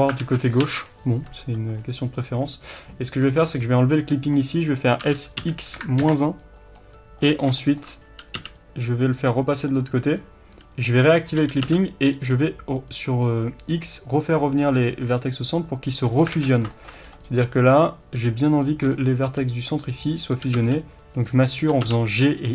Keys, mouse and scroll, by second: 0.2 alt+a, 3.5 click, 5.1 s, 7.2 scroll up 1, 7.6-10.9 shift+middle drag, 8.1 g, 10.9 click, 11.4 g, 16.1-16.7 scroll down 2, 16.3 alt+a, 16.7-20.0 shift+middle drag, 17.1 scroll up 1, 18.6 b, 18.8-19.2 scroll up 2, 19.2 g, 20.0 right click, 20.4 g.